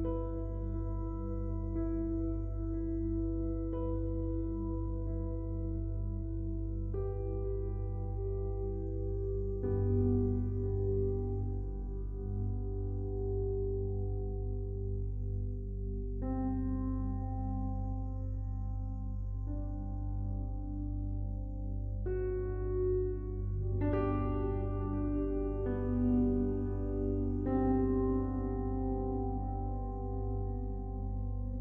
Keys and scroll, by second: 23.1 ctrl+t.